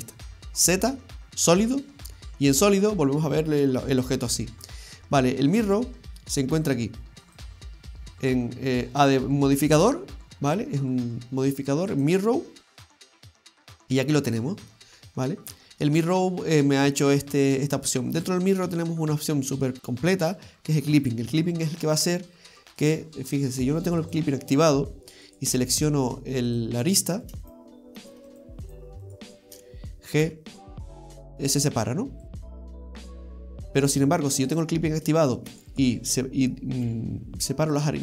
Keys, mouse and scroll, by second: 0.4 z, 0.7 z, 3.6 middle click, 7.3 click, 13.8 middle click, 19.8-21.0 scroll down 2, 21.0 click, 22.3 middle click, 24.1 click, 25.3 right click, 26.6 click, 27.3 right click, 27.5 alt+shift+right click, 30.2 g, 33.2 ctrl+z, 33.5 ctrl+z, 34.5 click, 35.2 right click, 35.6 alt+shift+r, 36.9 g.